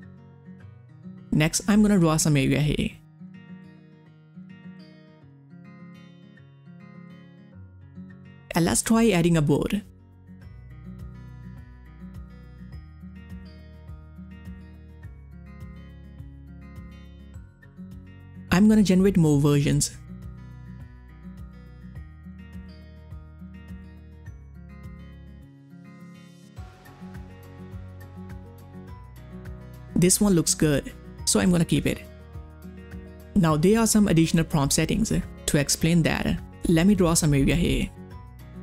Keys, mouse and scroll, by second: 0.0-0.9 typing, 0.1 click, 3.4-6.6 drag, 9.2 click, 9.6-10.7 typing, 11.9 click, 15.0 click, 15.0 click, 21.1 click, 21.1 click, 22.6 click, 25.1 click, 25.1 click, 27.9 click, 27.9 click, 31.9 click, 31.9 click, 35.5-35.8 typing, 36.5-38.6 drag.